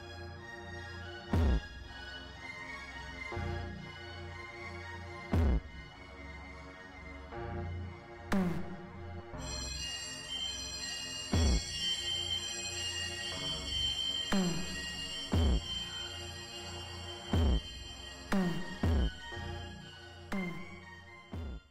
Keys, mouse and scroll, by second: 1.9 click, 2.4 right click, 3.6 click, 5.8-8.1 drag.